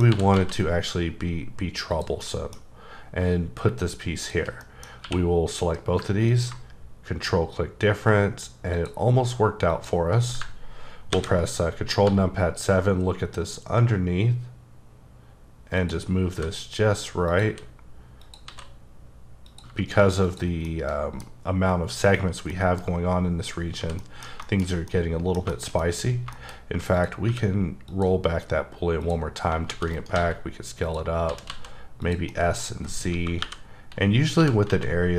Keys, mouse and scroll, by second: 0.1 scroll up 1, 0.1 r, 0.4 z, 1.9 click, 2.2 middle click, 2.6-4.2 scroll down 2, 4.2 shift+click, 4.6 middle click, 5.0 q, 6.3 ctrl+click, 9.7 click, 11.1 ctrl+KP_7, 12.1 g, 15.8 click, 15.9 Caps_Lock, 16.3 g, 17.3 click, 17.5 r, 18.2 click, 18.5 s, 19.5 click, 19.7 g, 20.2 click, 20.7 middle click, 22.3 scroll down 2, 22.5 middle click, 23.0-23.4 scroll down 1, 23.6 scroll down 1, 23.8 h, 24.0 middle click, 26.0-26.6 scroll up 5, 26.3 middle click, 26.9 click, 27.3 q, 27.9 click, 28.5 scroll down 1, 29.0 click, 29.7 shift+d, 29.9 right click, 30.2 s, 30.9 click, 31.3 s, 31.5 z, 32.0 click, 32.3 middle click, 32.7-33.2 scroll down 1, 33.2 KP_1, 33.4 KP_1, 34.2 scroll up 2, 34.4 g, 34.7 z.